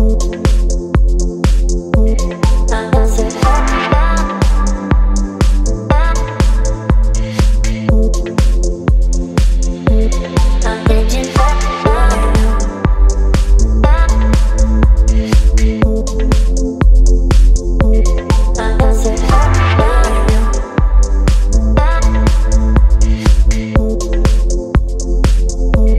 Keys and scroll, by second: 0.3 Delete, 3.4 space, 4.9 ctrl+BackSpace, 5.5 space, 7.0 space, 13.1 Delete, 13.5 space, 15.8 Delete, 17.1 Delete, 18.3 Delete, 19.2 Delete, 21.0 ctrl+BackSpace, 24.1 Delete.